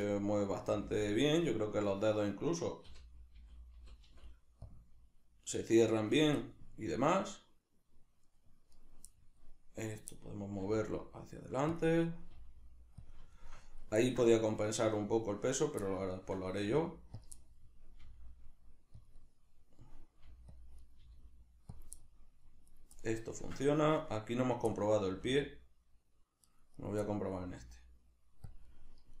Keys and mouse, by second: 0.5 right click, 0.7 g, 1.1 right click, 2.9 l, 4.7-6.4 drag, 6.4-8.8 middle drag, 8.8 right click, 9.2-9.8 middle drag, 9.8 right click, 10.2-11.8 middle drag, 10.6 g, 11.8 click, 11.9-13.2 middle drag, 12.4 g, 13.2 click, 13.4-15.4 shift+middle drag, 15.4 right click, 15.9-17.3 shift+middle drag, 16.7 g, 17.3 click, 17.4-19.1 middle drag, 18.0 g, 19.1 click, 19.2-20.6 middle drag, 20.2 g, 20.6 click, 20.8 right click, 21.0 g, 21.8 click, 22.0-22.8 middle drag, 22.8 right click, 23.0-24.4 middle drag, 24.4 right click, 24.7-26.6 middle drag, 25.1 r, 26.8 right click, 27.1-28.5 middle drag, 27.4 r, 28.5 click, 28.7-29.2 middle drag.